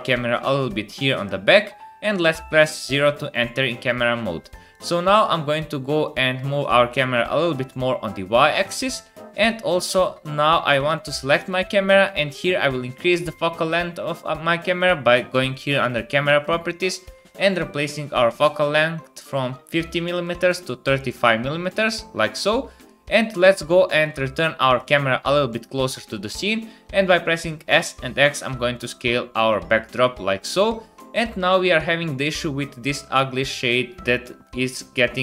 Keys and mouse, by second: 1.1 KP_0, 4.7-6.1 middle drag, 9.4-12.2 drag, 9.9 space, 10.5 space, 13.4-20.3 drag, 20.3-21.3 middle drag, 21.3-24.7 drag, 24.7 middle click, 25.8 middle click, 26.4-33.4 drag, 27.1 s, 34.7 click, 34.9-35.2 drag.